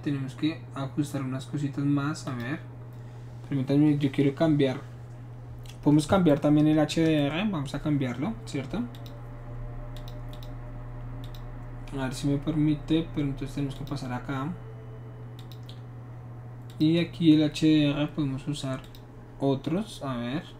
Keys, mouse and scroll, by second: 2.2 click, 8.9 shift+click, 9.9 click, 10.3 click, 11.2 click, 13.7 click, 15.4 click, 16.7 click, 18.8 click.